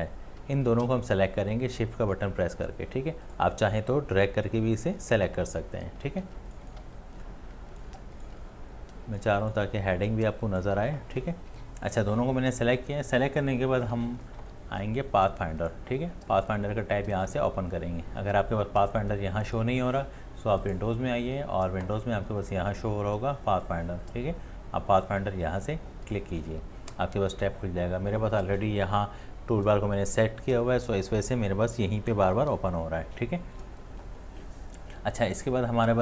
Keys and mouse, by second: 0.4 space, 6.2 space, 7.1-7.7 click, 7.4 click, 7.5 click, 7.6 click, 7.9 space, 8.0 space, 8.1 space, 8.2 click, 8.7-9.1 click, 9.0 click, 9.0 click, 9.2 click, 9.3 space, 9.4 space, 9.5 click, 10.1-10.5 click, 10.2 click, 10.3 click, 10.7 space.